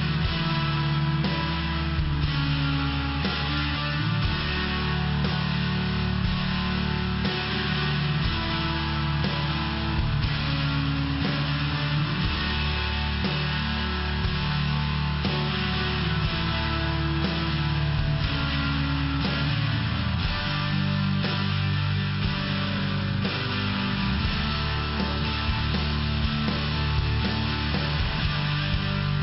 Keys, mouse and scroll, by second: 0.6 click, 1.2 click, 1.5 click, 1.8 click, 2.3 click, 2.4 click, 2.8 click, 2.9 click, 3.2 click, 3.4 click, 3.7 click, 3.8 double click, 4.2 double click, 4.4 double click, 4.7 double click, 4.8 double click, 5.2 double click, 5.3 double click, 5.6 double click, 5.8 double click, 6.0 click, 6.2 click, 6.6 click, 6.7 click, 7.0 click, 7.2 click, 7.5 click, 8.0 click, 8.2 click, 8.5 click, 8.7 double click, 9.0 double click, 11.1 click, 11.2 click, 12.4 click, 13.8 click, 14.5 click, 14.6 click, 15.0 click, 15.1 click, 15.5 click, 15.7 click, 16.0 click, 16.1 double click, 16.6 double click, 16.7 double click, 17.1 double click, 17.6 click, 18.2 click, 18.9 click, 19.7 click, 20.7 click, 21.7 click, 22.5 click, 22.7 click, 23.0 click, 23.1 click, 23.9 click, 23.9 click, 25.4 click, 26.1 click, 26.8 click, 26.9 click.